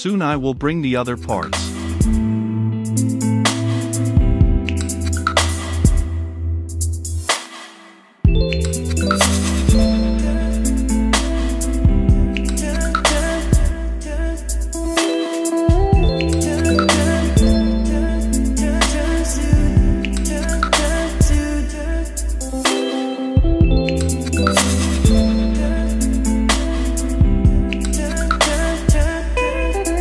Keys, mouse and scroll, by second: 0.0 click, 1.1 ctrl+v, 2.1-17.1 drag, 17.5 click, 17.8 click, 18.6-23.4 drag, 23.4 right click, 24.0 click, 26.0 click, 27.3-30.0 drag.